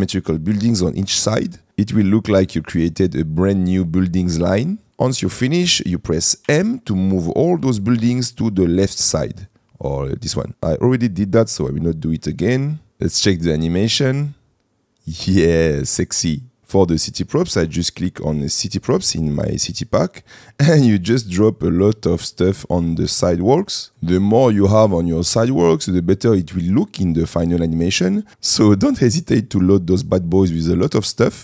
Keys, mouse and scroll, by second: 2.3 middle click, 4.1-4.5 shift+middle drag, 4.9 middle click, 6.6 m, 12.9 space, 22.7 middle click, 23.6 middle click.